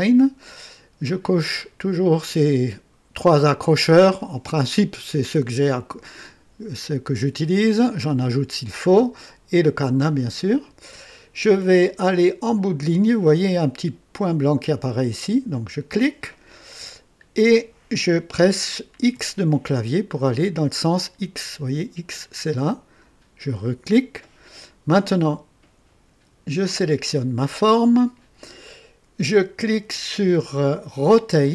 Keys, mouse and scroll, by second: 15.5 click, 19.1 x, 23.5 click, 26.6 click, 31.4 click.